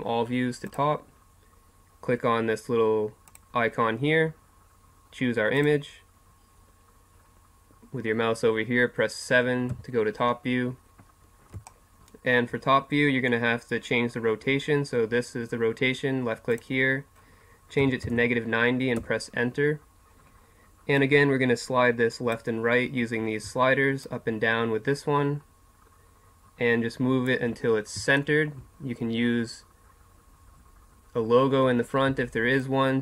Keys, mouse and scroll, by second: 4.3 click, 9.7 KP_7, 11.7 click, 16.5-19.0 drag, 21.0 click, 22.1-25.9 drag, 27.8 middle click, 32.6-33.0 drag.